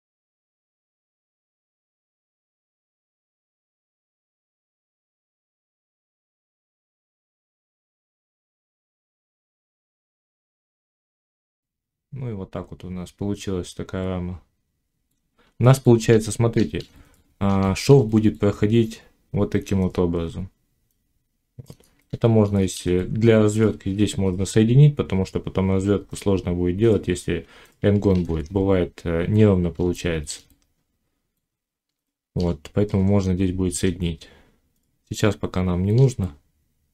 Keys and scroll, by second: 0.6 j, 1.6 j, 2.6 g, 3.6 g, 8.0 alt+x, 9.0 ctrl+z, 10.2 alt+x, 10.6 d, 23.8 j, 28.0 ctrl+z.